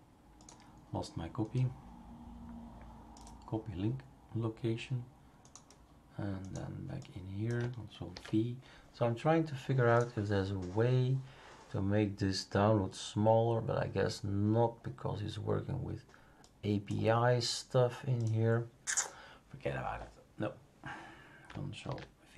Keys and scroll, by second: 8.1 ctrl+v, 21.8 ctrl+f.